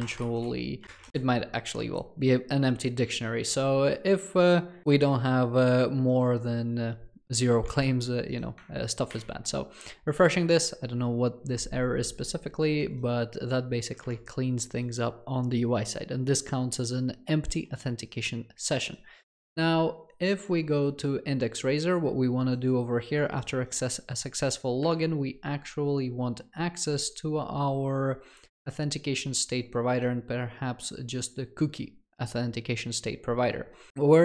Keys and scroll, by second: 0.8 Return.